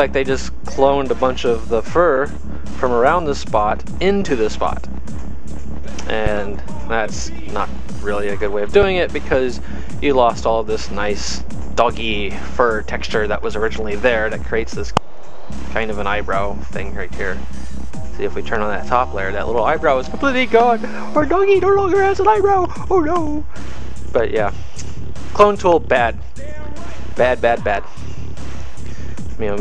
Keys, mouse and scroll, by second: 3.8 v, 7.6 click, 20.0 click, 25.4 click, 27.2 click.